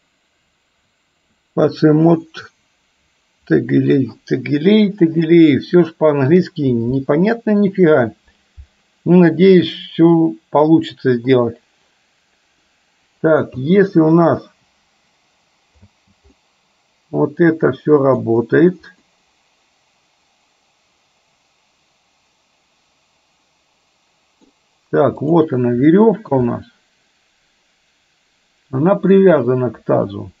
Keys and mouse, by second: 13.6 space, 15.9 space, 16.4-18.4 middle drag, 19.3-24.5 middle drag, 25.9-26.4 shift+middle drag, 26.6-30.4 middle drag.